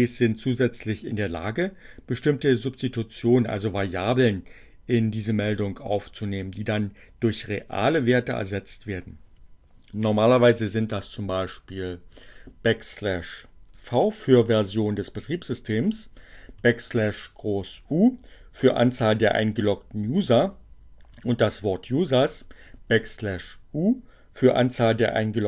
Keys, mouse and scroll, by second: 13.7 v, 14.0 space, 16.8 alt+shift+u, 21.4 space, 24.0 space.